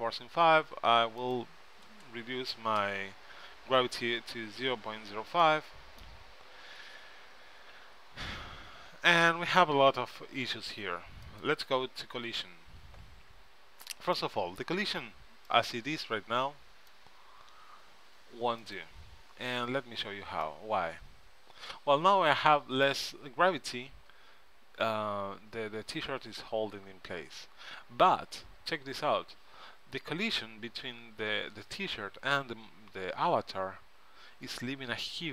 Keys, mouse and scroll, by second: 1.3-3.2 drag, 3.8 middle click, 11.4-13.1 drag, 14.4-15.6 middle drag, 15.6-17.3 right drag, 18.7-20.7 drag, 21.5 middle click, 29.0-31.2 middle drag.